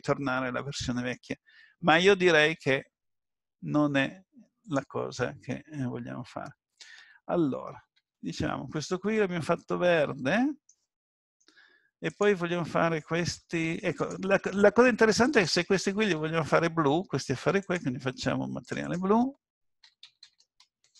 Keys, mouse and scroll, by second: 8.0 Tab, 8.7 middle click, 10.9-11.3 scroll down 3, 12.1 click, 12.1 scroll down 1, 14.0 shift+click, 17.6 shift+click, 18.7 click.